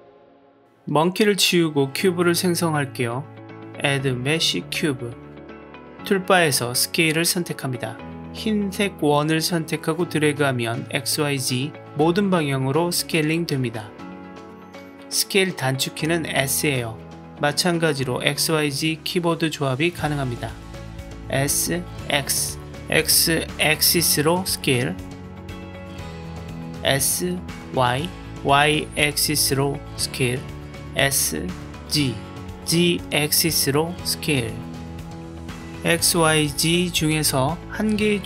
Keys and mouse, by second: 2.0 Delete, 3.7-5.1 drag, 7.2-8.3 drag, 11.5-14.3 drag, 14.8 click, 15.3 click, 15.7 s, 21.2 s, 22.3 x, 26.5 s, 27.5 y, 31.5 s, 32.4 z, 36.7 click.